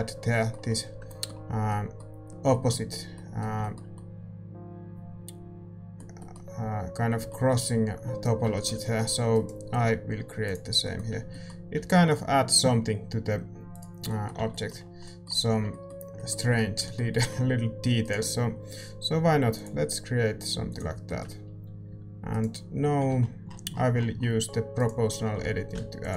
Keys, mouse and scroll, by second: 0.9 Tab, 0.9 a, 2.5 Tab, 10.5 click, 10.5 right click, 11.1 Tab, 11.7 Tab, 14.3 a, 15.4 Tab, 15.9-23.1 middle drag, 15.9 a, 16.5 a, 18.0-21.1 right drag, 21.1-23.1 drag, 23.1 s, 23.1 g, 25.4-26.1 typing.